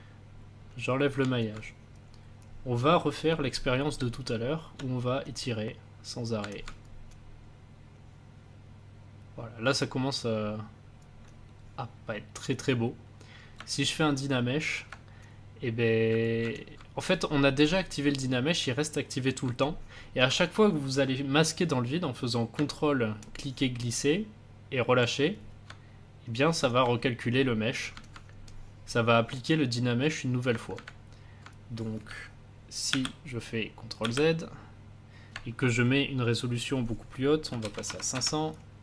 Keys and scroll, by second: 3.9 space, 32.8 ctrl+z, 33.9 ctrl+z, 37.2-38.0 typing, 38.0 Return.